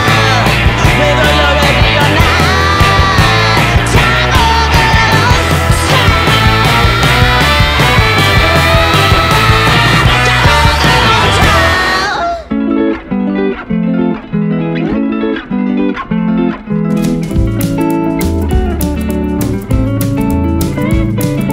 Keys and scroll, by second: 0.9 F3, 2.8 shift+Page_Up, 3.4 Escape, 4.6 F2, 9.6 space, 10.0 F4, 10.4 Escape, 15.2 Escape, 18.4 c, 20.8 shift+Page_Up, 21.4 shift+F2.